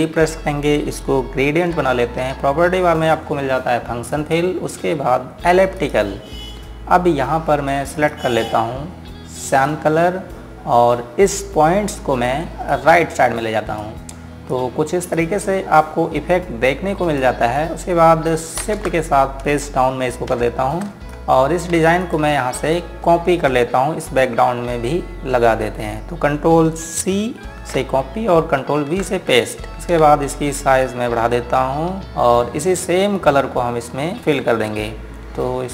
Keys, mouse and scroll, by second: 2.4 g, 4.8 click, 13.3 click, 19.4 ctrl+space, 21.4 scroll down 1, 21.8 click, 22.2 scroll up 1, 22.8 ctrl+alt+click, 23.4 ctrl+alt+click, 24.4 scroll down 1, 26.6 scroll up 1, 28.5 ctrl+c, 29.4 ctrl+v, 29.7-30.8 scroll down 1, 31.6 shift+click.